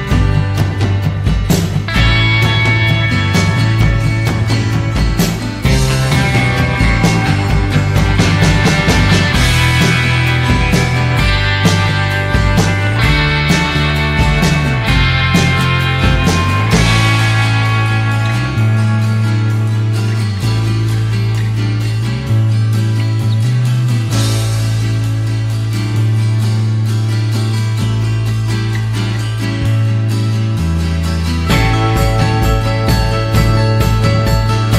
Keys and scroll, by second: 1.6 ctrl+z, 8.4 ctrl+z, 22.0 Delete, 29.0 ctrl+z.